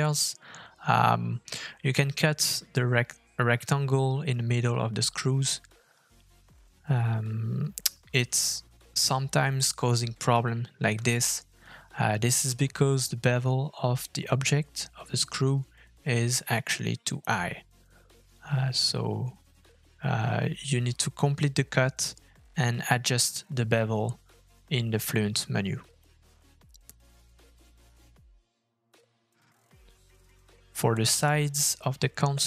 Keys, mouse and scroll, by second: 0.5 click, 1.5 f, 2.6-3.3 scroll up 2, 3.3 scroll up 1, 14.6 middle click, 15.1 shift+middle click, 15.4-16.1 scroll up 1, 16.1 scroll down 1, 16.5 shift+middle click, 20.5 shift+middle click, 20.8-21.1 scroll up 2, 21.1 shift+middle click, 21.6-22.4 scroll up 1, 23.3 f, 28.1 click, 28.5-28.8 scroll down 2, 28.8 middle click, 29.4 scroll down 2, 29.7 shift+middle click, 30.1 click, 30.3 middle click.